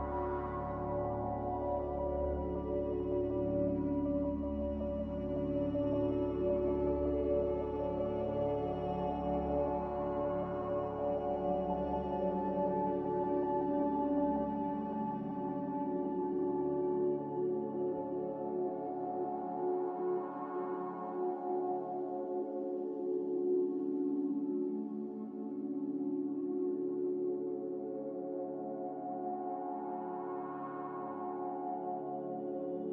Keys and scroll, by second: 1.0 ctrl+c, 4.6-6.0 typing, 9.4 x, 10.8-11.9 typing, 13.1-14.7 typing, 16.6-17.4 typing, 20.6-22.3 typing, 24.2 ctrl+z, 27.3 ctrl+z, 27.8 ctrl+z, 31.1-32.0 typing.